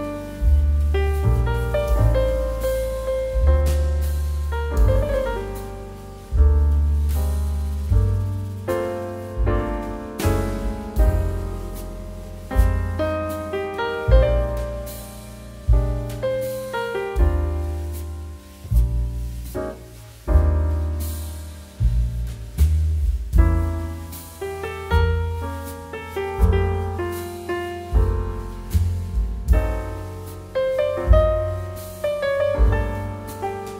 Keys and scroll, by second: 0.2 [, 1.8 x, 3.3 ], 3.9 ctrl+z, 4.1 x, 5.0 x, 6.0 [, 17.9 ctrl+z, 19.4 [, 24.8 ctrl+z, 28.8 p, 30.1 b, 30.7 [, 33.5 ctrl+z.